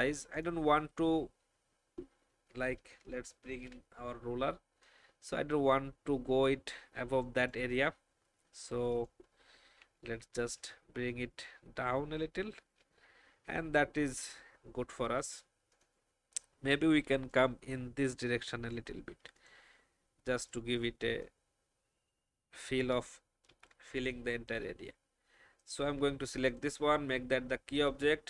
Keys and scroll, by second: 3.4 ctrl+shift+r, 9.8 shift+Down, 10.1 shift+Down, 11.3 shift+Left, 23.5 ctrl+alt+r.